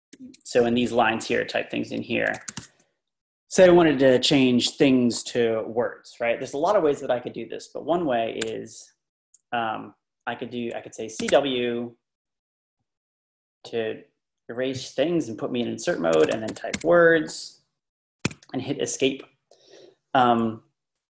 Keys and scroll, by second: 0.0-0.3 typing, 0.7 Up, 2.1 Escape, 2.1-2.9 typing, 8.4 w, 11.0-11.8 typing, 16.0-17.2 typing, 18.2 Escape.